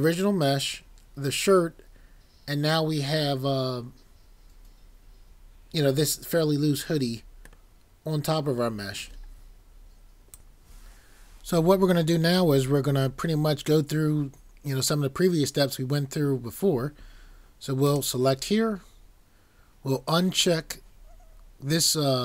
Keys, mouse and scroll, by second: 7.7 middle click, 10.3 click.